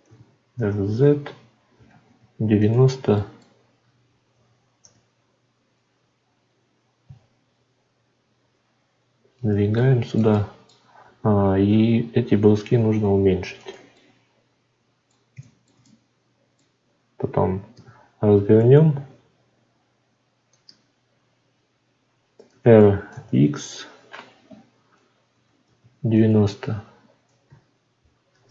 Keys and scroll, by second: 28.3 shift+d.